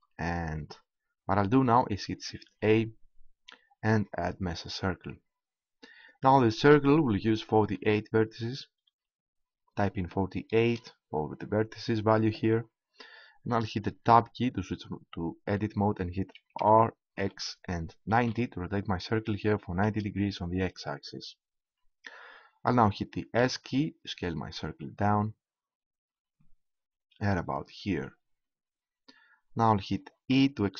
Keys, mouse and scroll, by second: 2.4 shift+a, 6.0-7.9 drag, 14.0 Tab, 16.6 r, 23.4 s, 27.4 click, 27.8 right click, 28.2-29.2 drag, 30.3 e.